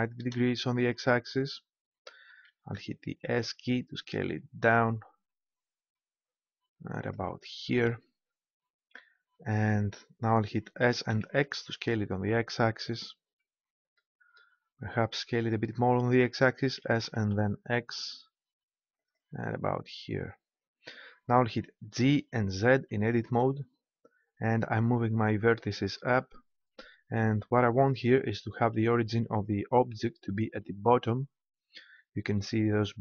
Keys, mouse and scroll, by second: 2.5 s, 7.1 click, 8.0 right click, 10.8 s, 13.0-14.6 drag, 14.8-16.7 middle drag, 16.7 s, 19.1-20.8 drag, 21.9 g, 25.8-27.2 drag, 27.4 click.